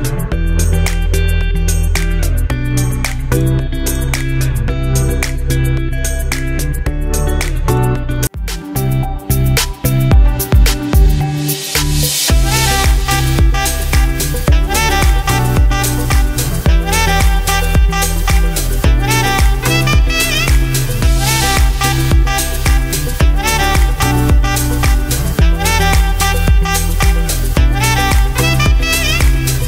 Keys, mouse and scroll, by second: 3.3 m, 4.1 BackSpace, 4.6 shift+m, 6.9-9.8 typing, 10.8-20.0 drag, 20.0-29.6 drag.